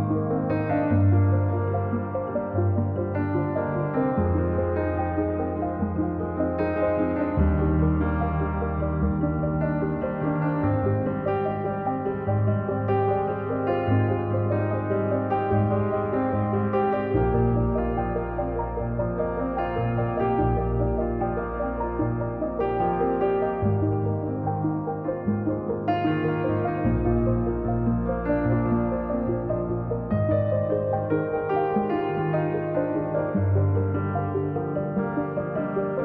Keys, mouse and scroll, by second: 1.5 scroll down 2, 1.7 middle click, 2.1 scroll up 1, 2.2-3.9 drag, 3.9-6.5 middle drag, 6.5 KP_1, 7.5 scroll down 1, 8.0-9.4 drag, 9.4 right click, 9.8 right click, 10.4 click, 10.8 middle click, 11.5-12.9 drag, 14.9 click, 15.7-20.5 drag, 21.3-24.0 drag, 33.0-36.0 drag.